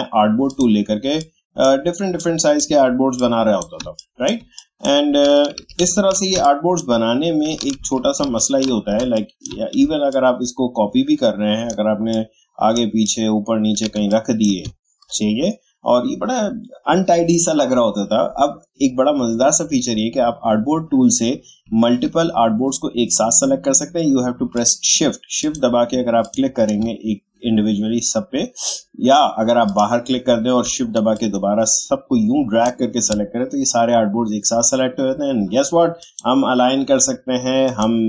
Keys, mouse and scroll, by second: 0.5-3.8 drag, 3.8 space, 4.0 click, 4.3 space, 4.5 click, 5.6 ctrl+z, 6.3 space, 6.4 click, 6.8 space, 7.8 ctrl+z, 9.0 space, 9.1 click, 10.2-14.0 alt+drag, 13.9 space, 14.1 click, 14.8 alt+scroll down 1, 21.6-24.3 alt+scroll down 1, 24.5 shift+click, 31.1-35.3 shift+drag, 36.0 click.